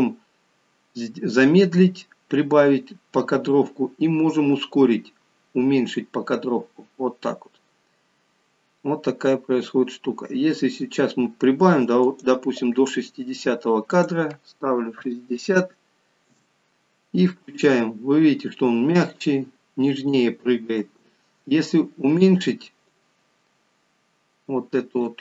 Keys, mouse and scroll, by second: 17.5 space, 23.0 click.